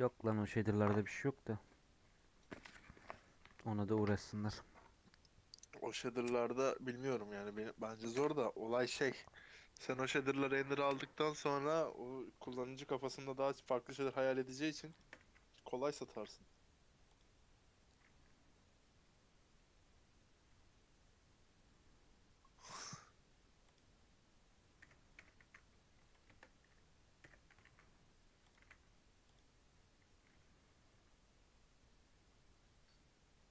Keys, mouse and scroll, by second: 14.1 click, 14.5 click, 14.9 shift+click, 15.2 s, 16.0 a, 17.1-20.5 drag, 22.8 click, 23.7 click, 24.7 l, 25.5 s, 27.1 l, 27.6 s, 28.5 a, 29.3 click.